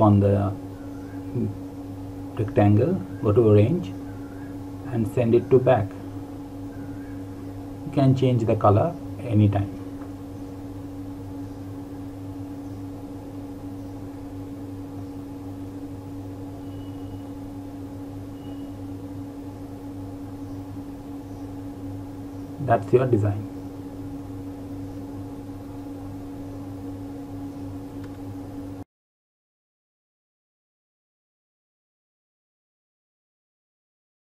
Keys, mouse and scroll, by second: 1.3 click, 2.0 right click, 6.1 click, 9.2 click, 12.5 click, 15.5 click.